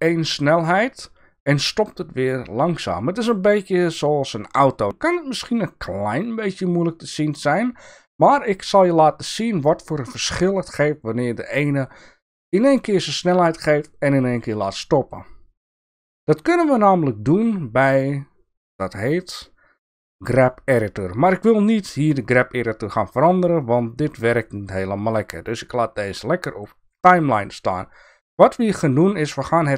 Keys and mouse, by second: 7.4 click, 15.6 click, 18.8-22.2 drag, 25.1-27.0 drag.